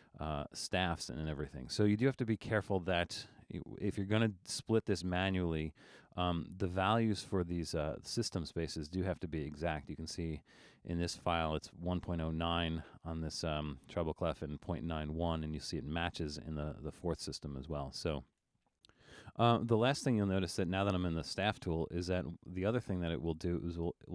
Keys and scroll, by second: 5.7 super+z.